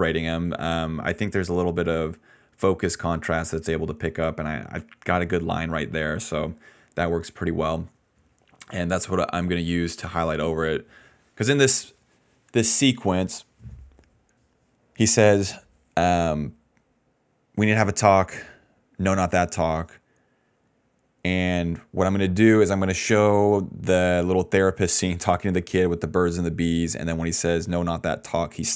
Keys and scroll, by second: 22.3 ctrl+shift+z, 23.2 ctrl+z.